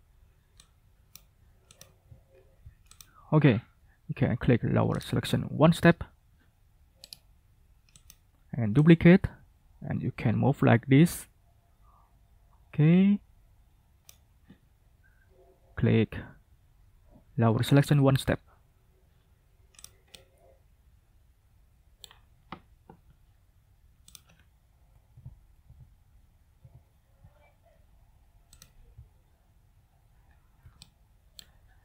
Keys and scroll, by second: 25.0 Down, 25.6 Down, 26.5 Down.